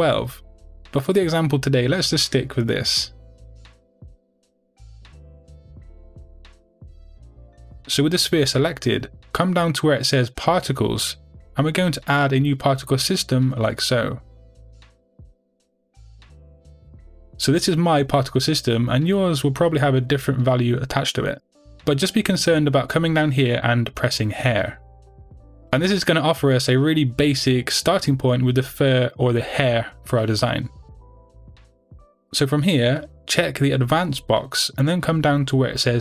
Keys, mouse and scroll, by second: 3.2 click, 4.2 click, 4.9-6.0 drag, 14.6 click, 19.3-26.3 drag, 26.8-33.9 middle drag, 33.9 click.